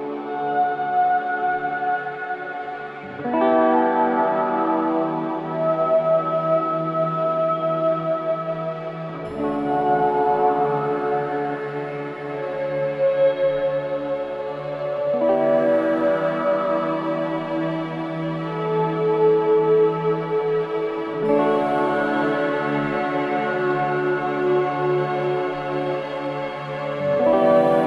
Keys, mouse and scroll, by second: 0.3-0.8 scroll up 1, 1.3-3.7 drag, 3.7-4.3 scroll down 1, 4.3 click, 4.8-5.1 scroll up 1, 5.7 click, 6.9 ctrl+z, 7.6-10.1 drag, 9.9-10.7 typing, 11.2 click, 12.9 scroll up 1, 15.7 click, 16.8-18.8 typing, 20.2 click, 23.1-23.5 scroll down 1, 25.9 click, 26.3 scroll up 1, 27.3-27.8 drag.